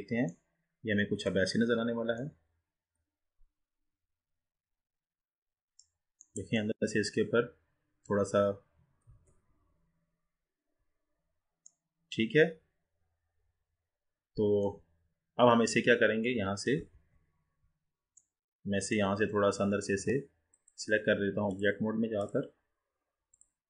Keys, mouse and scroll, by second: 0.5-1.7 middle drag, 1.7-2.3 scroll up 2, 2.3-5.4 middle drag, 6.3-7.1 middle drag, 7.1-9.4 scroll up 3, 9.4 ctrl+z, 11.2-11.7 scroll down 3, 11.7-14.8 middle drag, 17.1 ctrl+z, 18.3-19.3 middle drag, 19.3-19.7 scroll down 3, 19.7-20.5 scroll up 4, 20.7 click, 21.6-23.6 drag.